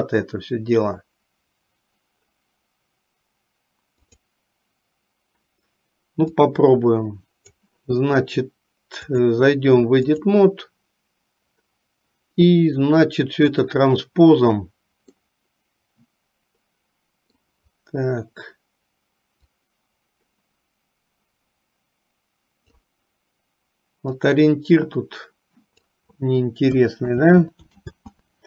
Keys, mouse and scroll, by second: 4.1 click, 6.4-7.7 drag, 9.1-10.6 drag, 13.6 click, 15.3-17.6 middle drag, 19.6 click, 19.8-23.0 drag, 24.5-26.2 drag.